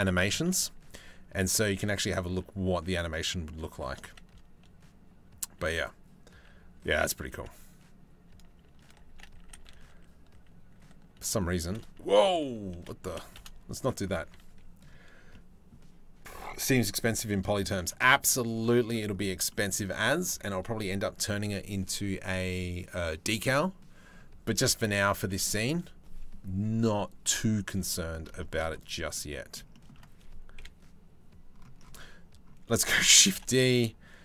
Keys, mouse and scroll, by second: 16.7 shift+middle click, 17.1 middle click, 17.9 middle click, 18.2 middle click, 19.1 middle click, 24.9 shift+middle click, 27.5 middle click, 28.0 shift+middle click, 28.7 middle click, 29.3 shift+middle click, 30.2 KP_7, 32.6 shift+d.